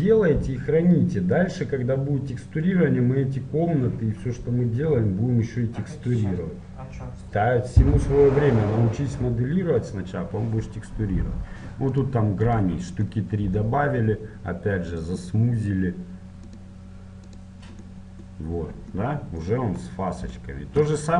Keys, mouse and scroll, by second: 12.2-19.4 drag, 18.1-21.1 middle drag.